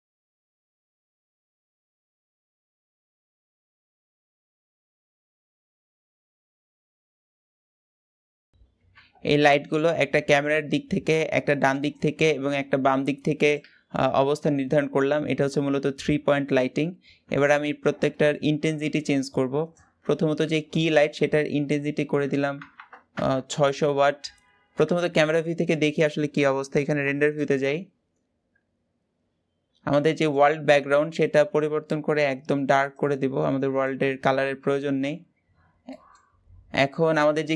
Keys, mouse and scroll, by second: 0.0-1.0 typing, 2.2-5.2 typing, 3.9 click, 5.9 click, 6.7-8.4 middle drag, 8.5-16.7 middle drag, 16.7-17.1 scroll down 2, 17.1-17.5 shift+middle drag, 17.5-17.9 scroll up 1, 17.9 shift+middle click, 18.3-19.8 scroll up 1, 19.8 click, 22.9 KP_0, 24.9 KP_0, 26.9 click, 30.0 click, 30.9 click, 35.5 scroll down 1, 35.6 middle click, 36.1-36.7 scroll down 4, 36.9-37.5 shift+middle drag.